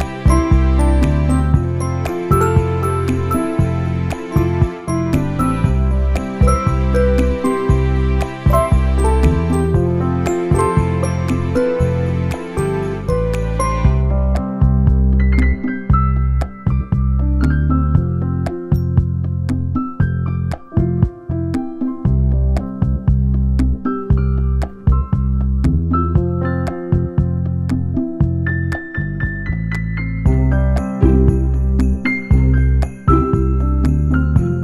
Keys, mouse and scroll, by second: 0.4 scroll up 7, 0.9 middle click, 2.2-3.4 scroll down 6, 3.3 shift+middle click, 3.6 middle click, 4.3 click, 4.7 Tab, 5.5 click, 5.8 click, 6.1 shift+middle click, 6.3 middle click, 6.5 Tab, 7.3 middle click, 8.9 Tab, 9.3 alt+click, 9.9 alt+shift+click, 10.4 alt+click, 11.6 shift+middle click, 11.8 middle click, 12.7 alt+shift+click, 13.1 middle click, 13.5 shift+middle click, 13.8 middle click, 14.5 right click, 15.4 a, 15.8 u, 18.4 u, 20.1 shift+middle click, 20.7 click, 21.7 l, 22.5 Tab, 23.4 l, 23.7 l, 24.1 r, 25.9 g, 28.4 click, 28.9 l, 28.9 ;, 29.5 g, 30.7 a, 30.9 s, 31.4 g, 32.6 g, 33.8 Tab, 34.2 middle click.